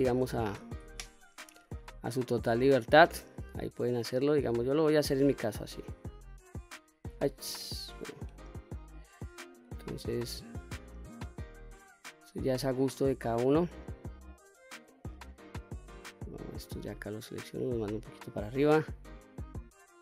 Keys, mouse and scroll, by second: 0.6 ctrl+z, 1.2 click, 2.3 click, 3.0-4.1 drag, 4.7 click, 6.1 click, 7.3 ctrl+z, 8.0 click, 8.7 click, 10.4-11.5 drag, 12.4-13.7 drag, 15.8 click, 17.1-18.1 drag, 18.5 click, 19.0-20.0 drag.